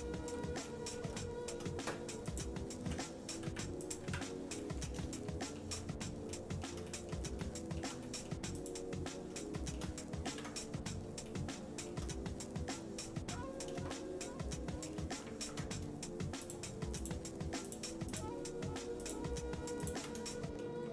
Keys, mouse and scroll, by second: 0.0 scroll down 1, 0.1 scroll up 1, 0.3 scroll down 1, 0.6 middle click, 1.2 shift+middle click, 2.3 click, 3.4 Delete, 3.8 click, 4.0 Delete, 4.6 middle click, 5.2 shift+middle click, 5.8 middle click, 6.3 shift+middle click, 6.9 middle click, 7.4 shift+middle click, 8.0 middle click, 8.6 click, 9.6 shift+middle click, 10.3 ctrl+s, 11.3 shift+middle click, 12.5-13.0 scroll up 2, 13.2 Tab, 13.9-14.9 shift+middle drag, 15.4 ctrl+Tab, 17.0 click, 17.6 alt+shift+click, 18.1 alt+shift+click, 19.2 click, 20.0 click, 20.3 shift+middle click.